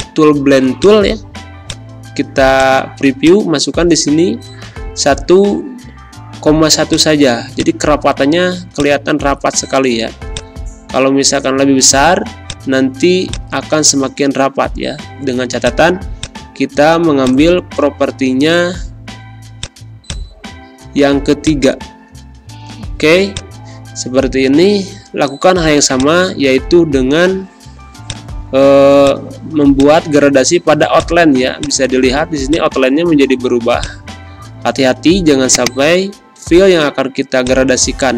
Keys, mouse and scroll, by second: 4.3 ,, 6.9 click, 9.4 1, 10.3-14.5 drag, 14.5 1, 15.5 click, 25.9-38.1 drag.